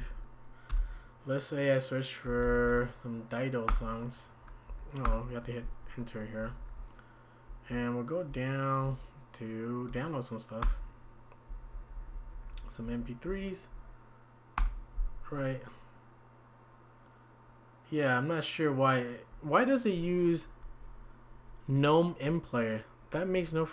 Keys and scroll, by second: 0.0 typing, 3.7 Return, 3.7 typing, 4.7 Down, 5.1 Return, 6.4 Down, 6.6 Down, 6.8 Down, 7.0-8.7 typing, 8.8 Up, 10.6-15.1 typing.